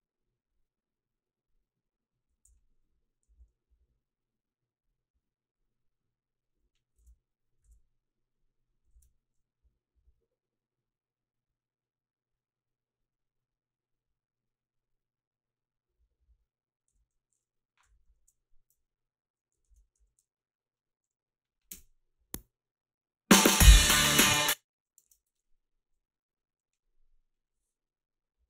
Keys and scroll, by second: 2.4 h, 3.3 a, 7.0 ctrl+b, 7.7 ctrl+b, 16.9 f, 18.0 i, 20.0 ctrl+r, 20.0 a, 21.7 space, 24.3 space, 25.0 alt+shift+s.